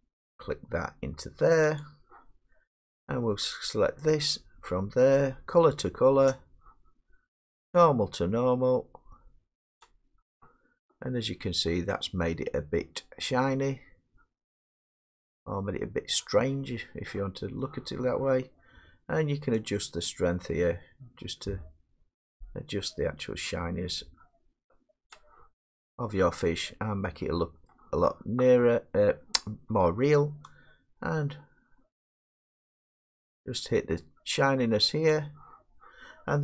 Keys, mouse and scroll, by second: 1.8 click, 3.3-10.9 drag, 11.7-12.3 scroll, 13.3 middle click, 16.7 middle click, 25.1 click, 25.8-26.1 scroll, 27.7 scroll, 29.8 middle click, 35.1 click.